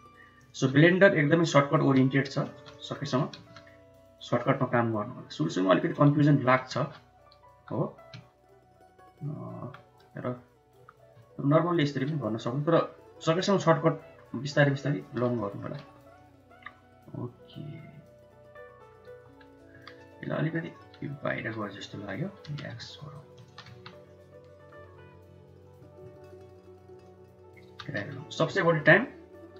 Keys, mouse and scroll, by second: 0.6 middle click, 3.3 ctrl+z, 6.6 ctrl+z, 13.7-14.9 shift+drag, 15.2 middle click, 15.7 Tab, 16.0-17.5 middle drag, 17.9-18.7 middle drag, 19.5 1, 21.2 g, 23.5 Tab, 23.9-24.6 middle drag, 24.7 Tab, 25.4 click, 26.8 shift+click, 27.6 g.